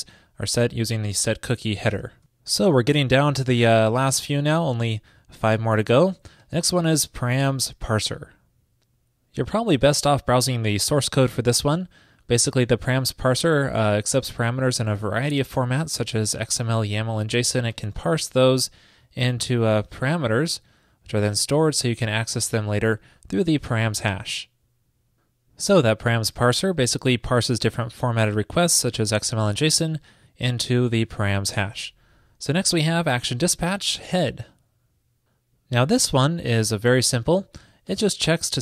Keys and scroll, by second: 26.7 super+v.